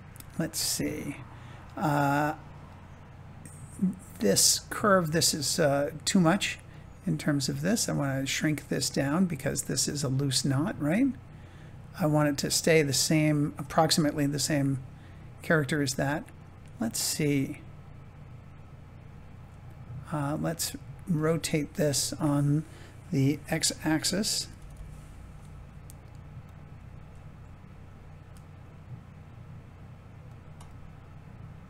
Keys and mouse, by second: 4.4 click, 14.0-16.3 middle drag, 16.8-19.0 middle drag, 21.3 Tab, 23.3 r, 23.7 x, 24.5 9, 24.6 0, 26.3 click, 28.1 g, 30.2 click, 30.7-31.6 middle drag.